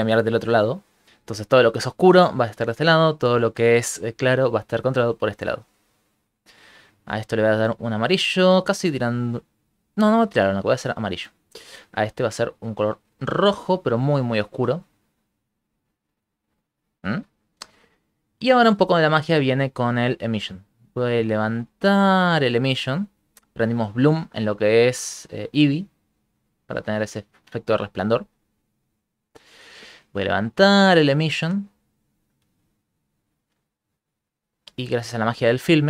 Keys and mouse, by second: 0.8 shift+middle click, 1.0 shift+middle click, 1.5 click, 3.0 click, 4.4 click, 5.9 shift+middle click, 6.8 click, 11.9 click, 12.5 click, 12.9 click, 13.8 click, 18.7 middle click, 19.1 ctrl+middle click, 19.4 middle click, 19.7 ctrl+middle click, 20.6 click, 25.3 click, 26.4 middle click, 27.3 click, 27.7 click, 28.5 click, 28.8 click, 29.2 click, 30.1 click, 33.1 middle click.